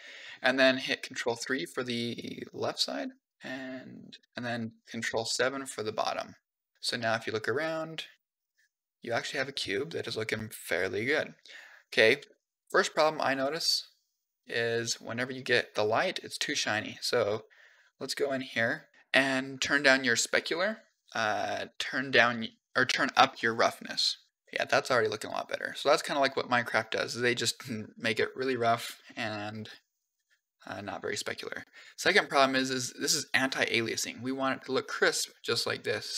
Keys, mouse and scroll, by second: 1.0 ctrl+KP_3, 2.0 click, 4.0 u, 4.9 ctrl+KP_7, 5.9 click, 6.4 u, 6.7 middle click, 8.0 Tab, 8.3-9.1 middle drag, 9.3-11.7 middle drag, 12.1-12.5 shift+middle drag, 12.6 scroll up 3, 13.1-15.0 middle drag, 15.3 middle click, 17.7-18.3 scroll up 6, 19.6 click, 22.7-24.3 drag, 24.3-25.3 middle drag, 28.4 middle click.